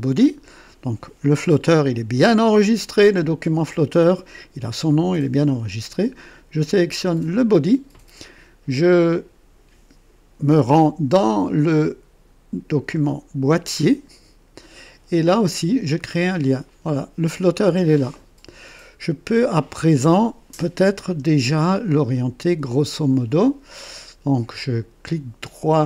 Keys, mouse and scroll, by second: 13.7 click, 15.9 click, 20.0-20.7 drag, 21.0 KP_1.